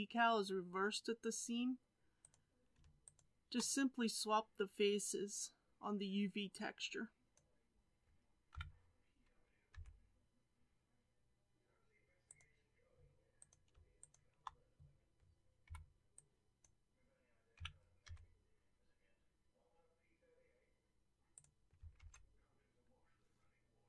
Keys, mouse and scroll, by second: 2.2 click, 3.1 shift+click, 8.6 g, 13.4 click, 14.1 shift+click, 16.6 b, 17.6 g, 21.9 alt+a.